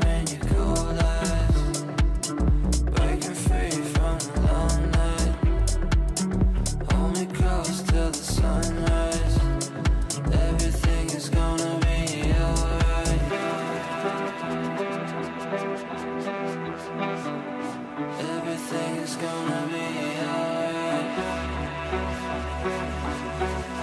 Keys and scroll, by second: 4.2 ctrl+q.